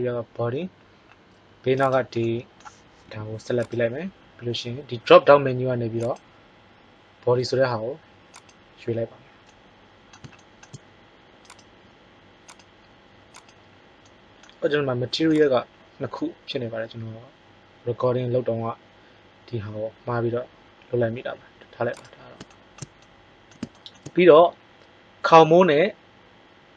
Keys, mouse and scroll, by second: 2.2-2.8 middle drag, 3.0 g, 11.5 right click.